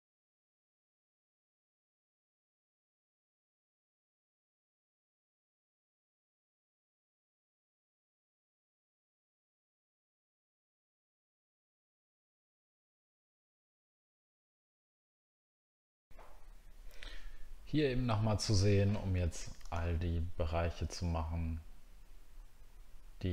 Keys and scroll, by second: 6.2 alt+scroll down 1, 14.0-14.4 alt+scroll down 1.